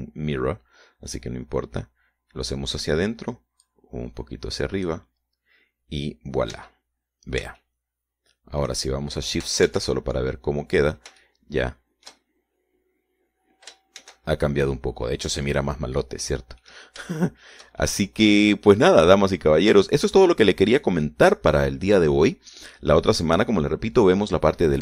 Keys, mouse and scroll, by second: 1.1-4.6 drag, 5.2-6.7 drag, 7.5 scroll down 2, 8.1 Tab, 8.5-9.2 scroll down 3, 9.2-10.4 shift+middle drag, 11.3 shift+z, 12.8-13.9 shift+middle drag, 15.6 shift+z, 16.1 shift+scroll down 2, 16.6-17.1 scroll up 2, 17.4-18.9 scroll down 5, 18.2 middle click, 18.9-20.7 shift+middle drag, 20.9-21.3 scroll up 2, 21.5-22.9 shift+middle drag, 24.7 scroll down 2.